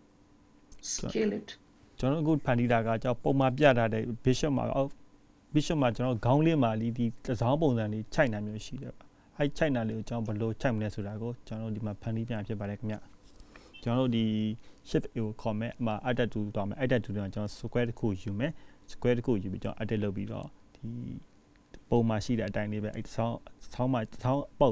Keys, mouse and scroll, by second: 6.8 scroll down 2, 6.8 g, 7.4-7.7 scroll down 1, 8.1 middle click, 9.3-10.0 scroll up 2, 10.5 shift+middle click, 12.0 click.